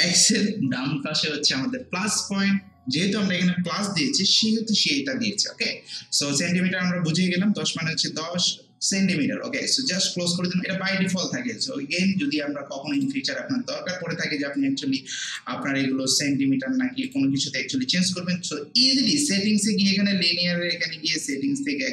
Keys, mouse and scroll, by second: 9.8 click, 12.9 click, 15.3 click, 21.2 click.